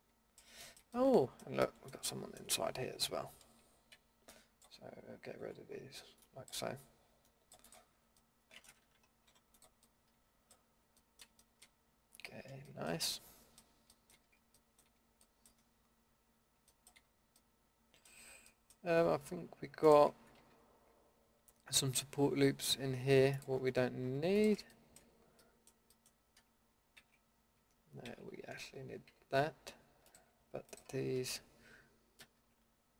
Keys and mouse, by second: 3.9 c, 9.3 Delete, 13.4-13.9 middle drag, 13.9 middle drag, 14.5 middle drag, 15.4-15.8 middle drag, 16.5-16.8 middle drag, 17.8-20.4 middle drag, 20.4 a, 24.7-26.0 middle drag, 27.0 ctrl+x, 28.1 ctrl+z, 29.1 a, 32.2 ctrl+x.